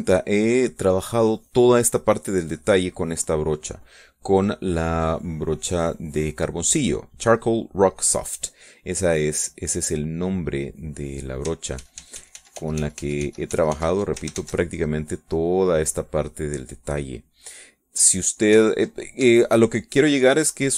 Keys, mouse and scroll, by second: 2.8-3.8 middle drag, 9.6 click, 10.0 middle click, 10.9-12.5 drag, 13.0 ctrl+z, 15.5 ctrl+shift+z, 15.9 ctrl+shift+z, 16.1 ctrl+shift+middle click, 16.8-17.9 drag, 18.4 middle click, 19.9 ctrl+click, 20.5-20.7 ctrl+shift+drag.